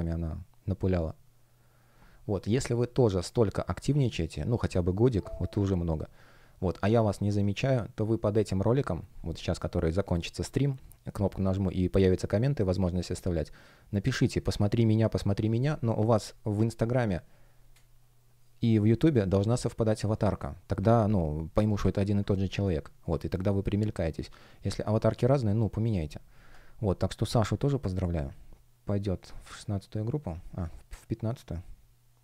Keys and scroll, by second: 17.5 space.